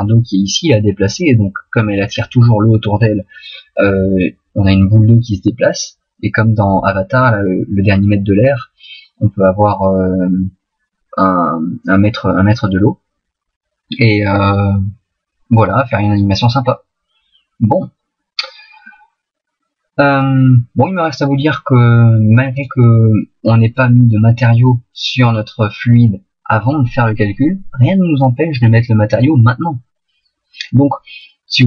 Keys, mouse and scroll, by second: 15.6 middle click, 18.9 middle click, 22.6 right click.